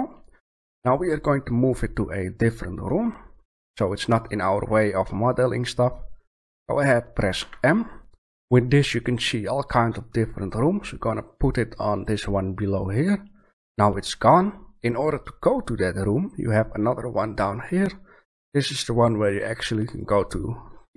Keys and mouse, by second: 7.3 m, 19.9-20.9 drag.